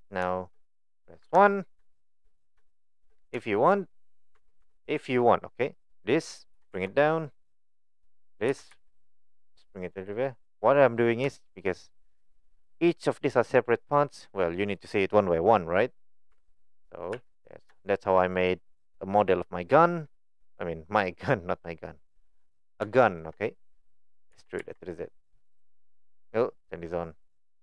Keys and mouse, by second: 1.2 KP_1, 2.0 shift+middle click, 2.7 shift+middle drag, 3.5 shift+middle click, 4.4 Tab, 4.6 Tab, 5.0 click, 5.6 click, 6.6 g, 8.1 click, 8.5 g, 10.4 click, 11.4 shift+middle click, 16.3 Tab, 17.1 a, 17.8 shift+middle click, 22.9 shift+middle click, 27.2 click.